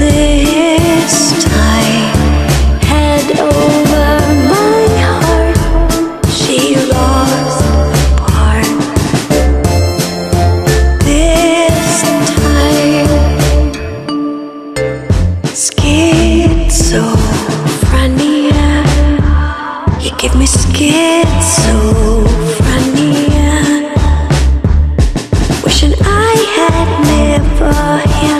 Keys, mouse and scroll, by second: 1.9 click, 3.6 click, 5.6 click, 7.2 click, 8.6 click, 10.1 click, 12.3 click, 13.7 click, 15.0-27.1 right drag.